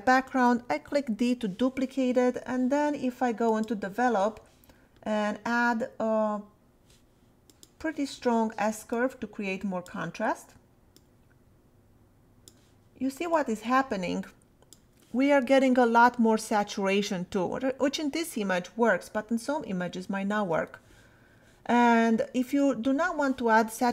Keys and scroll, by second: 0.3 d.